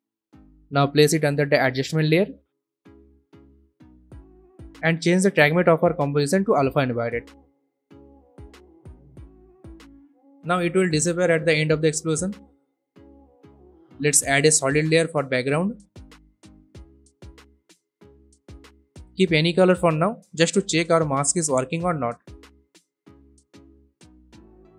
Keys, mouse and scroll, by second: 14.7 right click, 16.4 click, 17.4-18.4 typing, 19.3-20.9 drag.